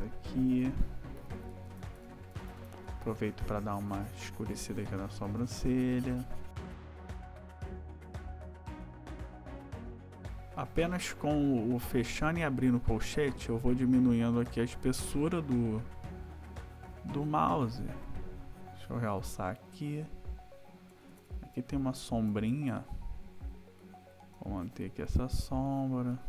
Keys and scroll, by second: 1.2 ], 7.3 ], 8.1 \, 9.4 ], 9.9 ], 13.2 ], 20.9 \, 24.4 ], 26.1 \.